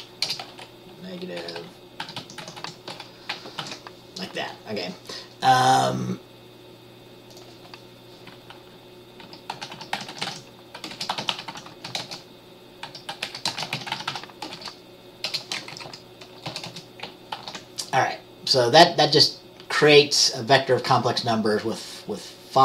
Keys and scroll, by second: 0.0-0.4 typing, 1.4-3.1 typing, 3.7 ctrl+s, 9.4 Caps_Lock, 9.7-15.4 typing, 15.9 Right, 16.0 Right, 16.6 Return, 16.8 Return, 17.4-20.0 typing.